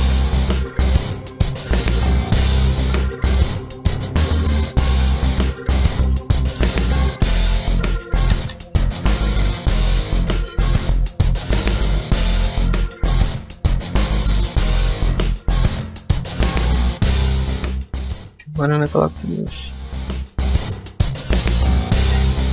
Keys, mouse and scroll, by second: 0.6 ctrl+shift+z, 1.2 ctrl+z, 1.4 scroll down 1, 1.6 middle click, 2.0 s, 4.4 middle click, 5.2 alt+right click, 5.8 alt+shift+right click, 6.3 s, 8.8 Tab, 9.2 middle click, 9.4 Tab, 10.4 alt+right click, 11.3 alt+shift+right click, 11.8 s, 14.1 Tab, 14.3 middle click, 14.5 shift+middle click, 15.2 Tab, 15.6 a, 16.0 middle click, 18.3 Tab.